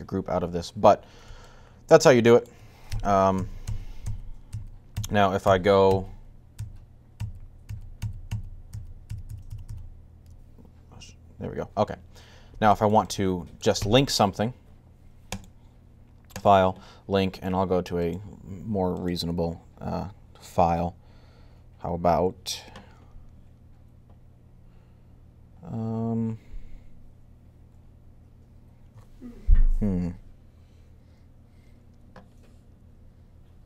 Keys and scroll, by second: 2.8 super+z, 3.2 super+z, 3.5 super+z, 3.9 super+z, 4.3 super+z, 4.7-9.4 typing, 16.1 typing.